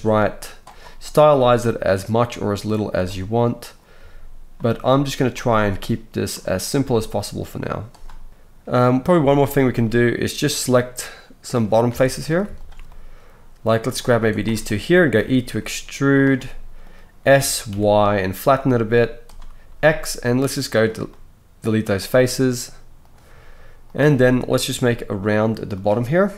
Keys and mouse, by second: 1.3 g, 3.4-5.3 drag, 3.9 g, 5.3-6.6 middle drag, 6.6 click, 6.8-11.5 middle drag, 6.8 g, 8.3 Tab, 11.5 click, 11.9 alt+a, 12.3 shift+middle click, 12.5 shift+click, 12.6-14.3 shift+middle drag, 14.3 shift+click, 14.4-18.2 shift+middle drag, 15.2 e, 17.2 s, 19.7 x, 23.0 click, 24.8 g.